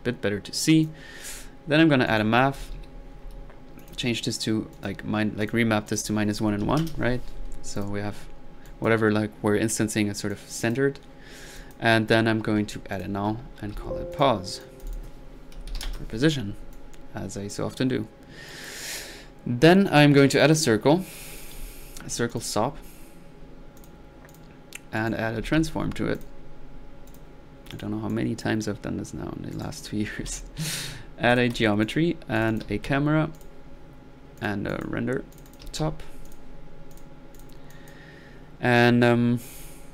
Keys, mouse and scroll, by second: 0.6 click, 2.1 right click, 2.4-3.2 typing, 3.8 click, 4.4 drag, 4.7 click, 5.4 drag, 5.9 drag, 7.7 click, 8.3-8.6 middle drag, 8.6-9.0 drag, 10.0-10.3 middle drag, 10.3 click, 12.9 click, 13.5-14.2 typing, 14.1-15.0 alt+drag, 16.7 click, 18.2 middle click, 18.5 click, 20.4-20.8 drag, 21.3-21.9 drag, 21.5 c, 22.3-22.7 drag, 23.8 click, 24.3 drag, 25.0 right click, 25.2-26.1 typing, 26.2-26.6 drag, 27.1 click, 27.8 click, 29.5 right click, 30.0-30.8 typing, 30.7-31.0 drag, 31.3 click, 31.9 drag, 32.4 click, 32.4-33.1 typing, 33.4 drag, 34.4-36.0 drag, 35.4-36.1 typing, 36.2 click, 36.9-37.2 drag, 37.4 drag, 37.7 click, 38.0-38.8 typing, 38.3 drag.